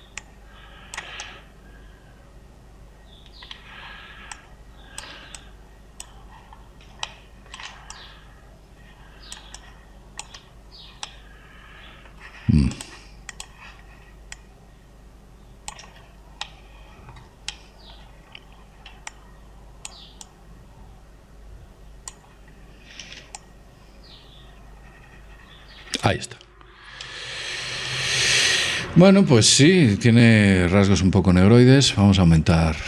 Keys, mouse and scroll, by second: 2.4 middle click, 3.0-4.2 middle drag, 5.5-8.4 drag, 8.3-10.2 middle drag, 9.2-12.5 drag, 12.5-14.0 middle drag, 14.0-17.4 drag, 17.4 middle click, 17.6-20.5 middle drag, 20.3-23.3 drag, 27.6-30.9 middle drag, 32.5-32.8 middle drag.